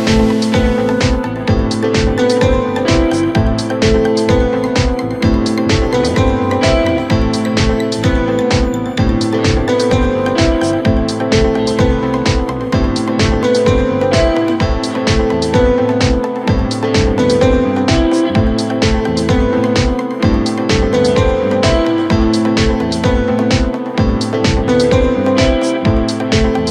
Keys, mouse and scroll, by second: 2.4 Tab, 3.4 drag, 4.0-5.7 middle drag, 5.7 KP_1, 7.0 scroll up 1, 7.3 scroll down 1, 7.6-10.2 middle drag, 10.2-13.3 drag, 16.2-17.6 middle drag, 17.6 KP_1, 19.6-22.8 middle drag, 22.8 KP_1, 23.8-24.8 scroll up 3, 24.8 scroll up 1, 25.1-26.7 scroll down 3.